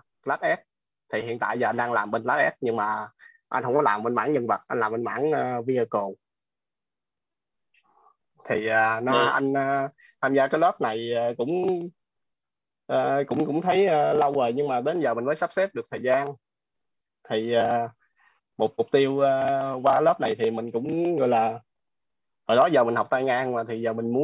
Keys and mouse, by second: 10.0 click, 13.4-20.4 typing, 22.0 g.